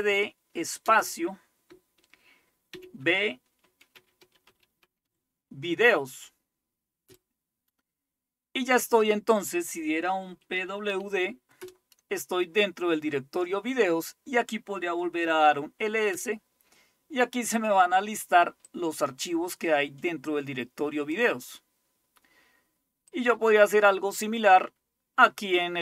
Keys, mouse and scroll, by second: 0.0-0.9 typing, 2.8 shift+v, 3.9-5.6 typing, 7.1 Return, 10.1-11.4 typing, 11.7 Return, 15.1-16.0 typing, 16.2 Return, 18.7-21.3 drag, 23.1 click, 23.1-23.5 typing.